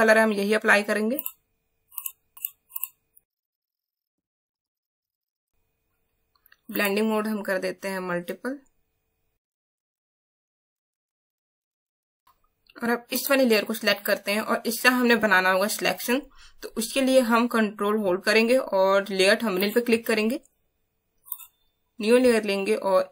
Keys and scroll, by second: 5.3 space.